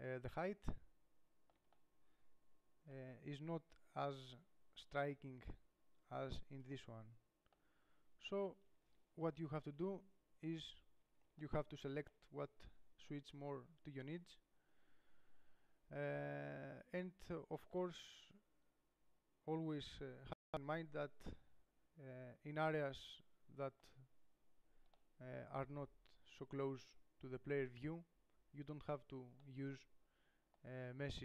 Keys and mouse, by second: 4.8 middle click, 10.1 ctrl+Up, 17.3-18.5 drag, 18.5 middle click, 19.2 middle click, 20.1-21.5 middle drag, 21.7-23.8 middle drag, 24.1-27.8 middle drag, 28.7-31.2 middle drag.